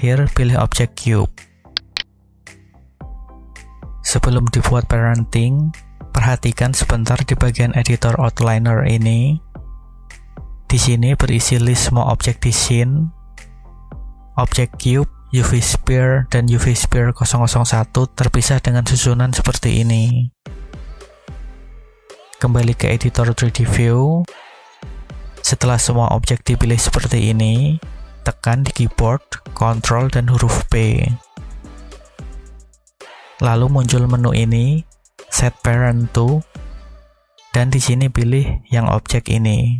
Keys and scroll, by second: 31.7 ctrl+p.